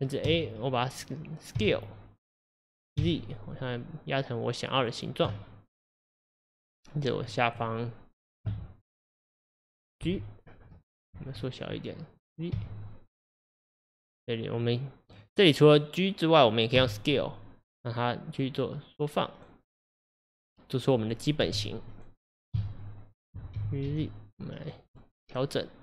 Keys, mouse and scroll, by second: 0.3 a, 1.6 s, 6.6 click, 7.1 click, 10.1-13.1 middle drag, 10.1 g, 16.8 s, 21.4 KP_1, 22.6 a, 23.6 g, 25.0-25.8 middle drag.